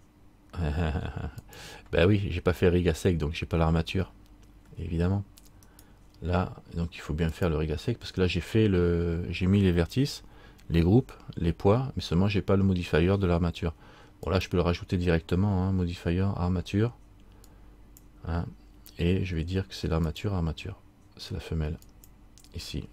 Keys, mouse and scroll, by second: 2.3 middle click, 5.8 right click, 7.5 click, 14.4 click, 20.2 click.